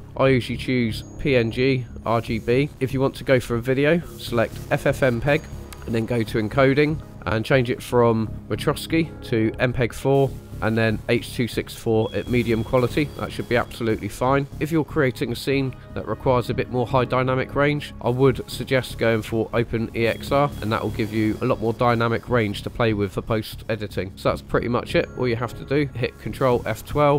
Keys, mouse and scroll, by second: 0.7 click, 2.7-4.7 drag, 5.5 scroll down 2, 6.1 click, 6.7 scroll down 2, 8.7-10.5 drag, 14.3 scroll up 1, 17.9-22.9 drag, 24.1-24.7 scroll up 4.